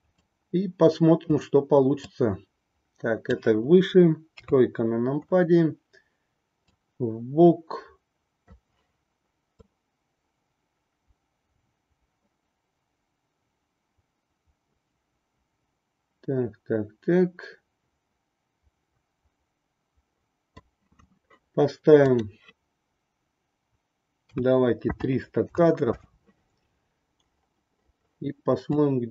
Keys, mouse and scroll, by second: 0.2-1.5 drag, 2.1-3.5 drag, 4.3 KP_3, 6.7-8.5 drag, 9.8-20.6 drag, 22.1-26.2 drag, 28.8-29.1 drag.